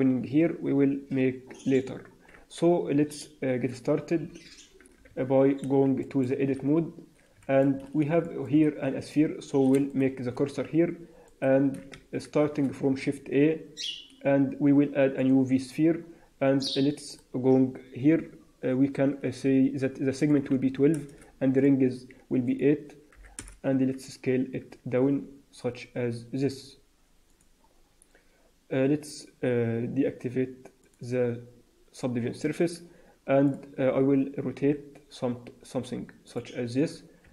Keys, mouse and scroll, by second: 2.2-2.7 scroll down 1, 4.2 alt+h, 5.0 Tab, 5.4 scroll down 2, 5.9 shift+middle click, 6.4 scroll up 2, 7.3 shift+middle click, 7.6-8.0 scroll up 5, 8.2 shift+middle click, 10.2 shift+right click, 11.2 right click, 12.4 shift+a, 17.2 click, 21.5 click, 22.4 click, 24.5 s, 30.7 click, 33.4 click, 34.5 r, 37.2 r.